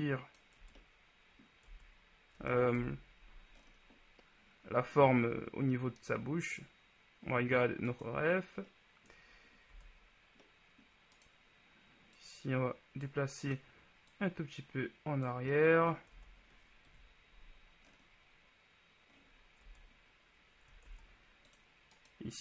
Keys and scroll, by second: 0.8 Tab, 2.5 Tab, 2.9 KP_1, 9.9 Tab, 16.4 Tab, 17.0 KP_1, 19.8 Tab, 21.0 ctrl+Tab.